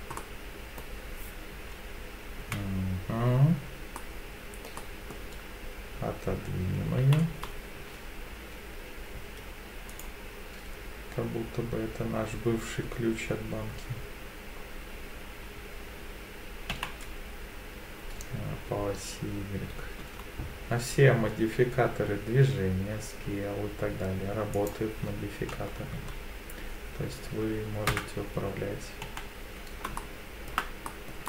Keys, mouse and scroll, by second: 0.2-0.8 middle drag, 2.4 KP_7, 4.0-4.7 middle drag, 4.8-5.1 middle drag, 7.0 g, 9.9 right click, 16.7 g, 24.5 click, 25.5 KP_3, 26.1 KP_1, 27.9 KP_1, 29.0 KP_3, 30.0-30.5 shift+middle drag, 30.9 middle drag.